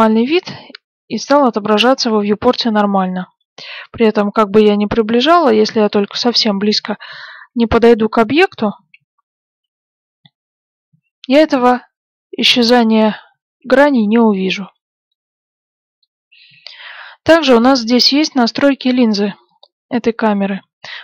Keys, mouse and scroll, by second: 1.9-3.8 middle drag, 3.8 scroll up 1, 4.4-6.3 middle drag, 6.6 shift+f, 14.6-15.0 scroll down 1, 15.0-18.5 middle drag.